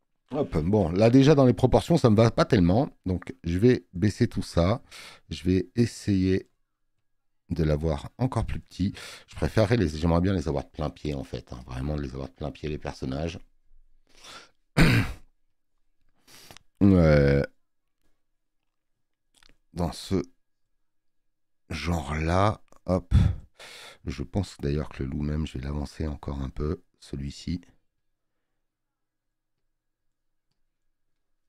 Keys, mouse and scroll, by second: 0.6 ctrl+t, 3.0 click, 6.0 click, 7.0 click.